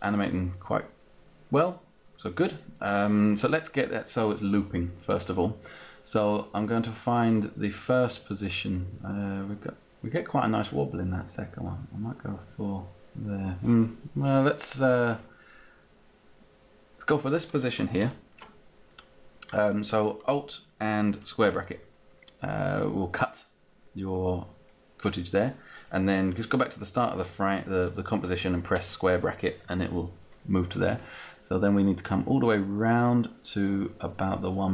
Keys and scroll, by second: 17.9 alt+[, 28.9 [.